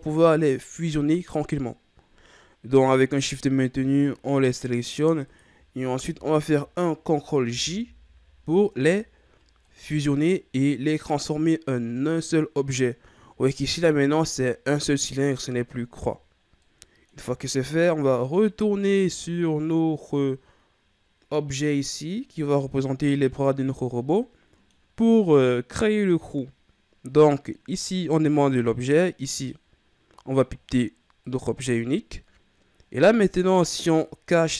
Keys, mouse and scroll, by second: 3.3 right click, 4.4 shift+right click, 5.3 shift+right click, 7.5 ctrl+j, 9.3-9.6 scroll down 2, 9.6-12.6 middle drag, 16.6-17.5 middle drag, 17.5-18.4 scroll up 1, 18.4 right click, 19.4-22.4 middle drag, 29.3 click, 32.9 scroll down 1, 33.0-33.8 middle drag, 33.8 right click.